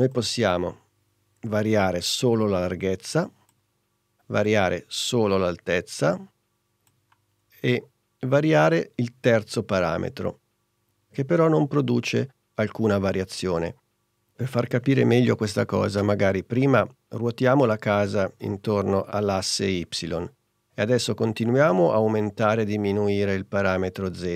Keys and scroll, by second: 3.8 super+z, 7.9 super+z.